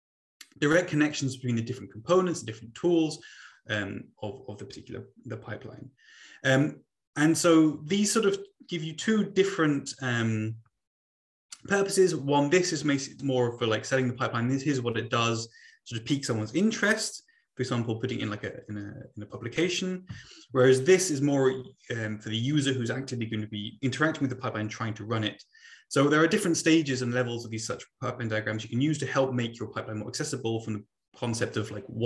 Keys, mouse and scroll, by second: 8.3 Left, 9.0 Right, 12.1 Left, 20.5 Right.